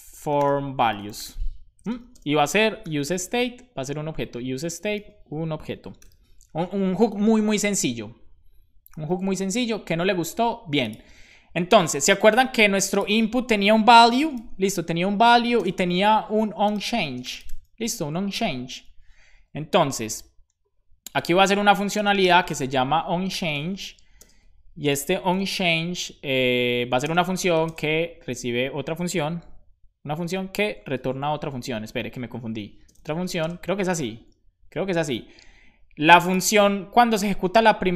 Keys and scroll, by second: 0.0-2.2 typing, 3.8 BackSpace, 4.6 Return, 5.0 shift+9, 6.9 super+s, 6.9 Right, 9.1 super+s, 13.8-18.4 typing, 21.8-24.3 typing, 25.3 shift+9, 27.1 space, 27.1 =, 27.7 shift+space, 32.0-33.9 typing, 33.9 Return.